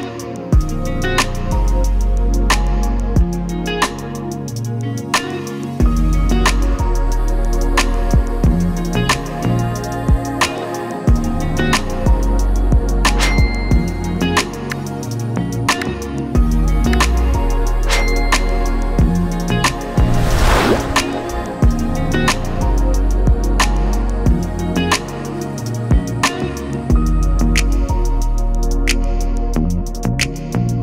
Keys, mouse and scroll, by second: 3.1 click, 3.9 typing, 7.8-19.5 drag, 22.5-25.3 drag, 28.0-30.1 drag, 29.3 BackSpace, 29.8 BackSpace, 30.1 Return.